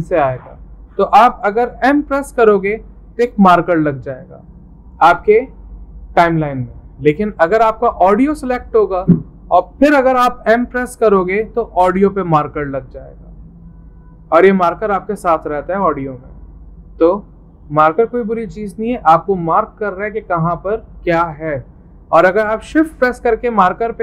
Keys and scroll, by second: 2.3 m, 10.8 m.